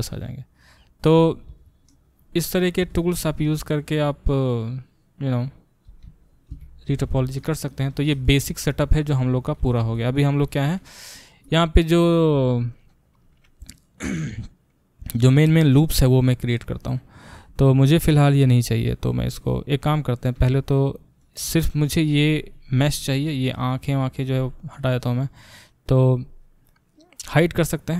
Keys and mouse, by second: 6.5 alt+b, 17.4 a, 20.3 Tab, 20.8-21.2 middle drag, 21.2 click, 21.3-27.9 middle drag.